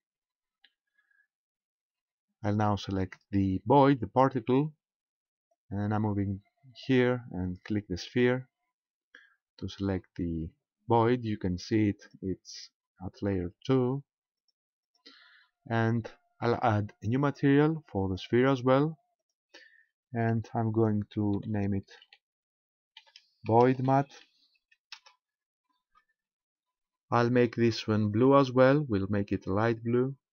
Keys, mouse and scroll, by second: 2.0-3.5 scroll down 1, 5.5 click, 8.1 click, 9.7-10.0 scroll down 2, 12.0 click, 12.7-13.6 scroll down 2, 14.4 click, 14.8 click, 18.0 click, 19.2 click, 28.2 click.